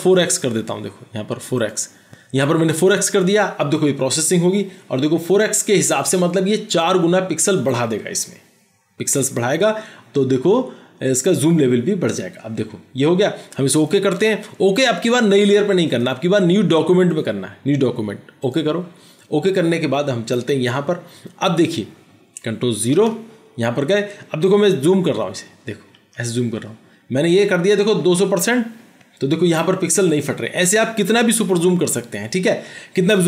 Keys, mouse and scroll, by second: 23.0 ctrl+0, 25.1 ctrl+=, 25.5 ctrl+=, 26.0 ctrl+=, 31.7 ctrl+=, 32.7 ctrl+-.